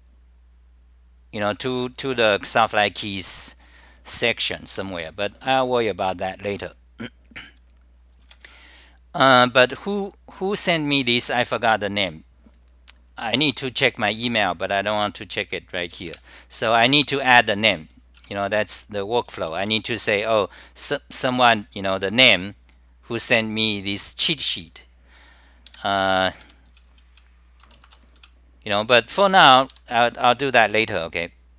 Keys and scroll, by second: 18.2 e, 31.1-31.5 typing.